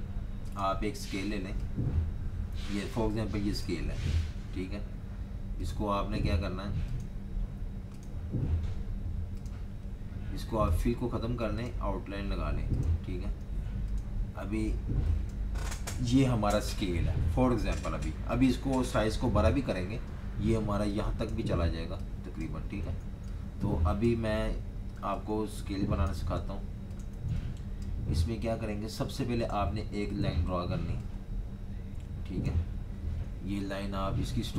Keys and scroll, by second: 4.2 v, 13.5 v, 19.5 super+-, 19.7 super+-, 22.9 typing, 24.4 v, 25.1 z, 26.5 v, 27.1 z, 28.2 v, 33.5 v.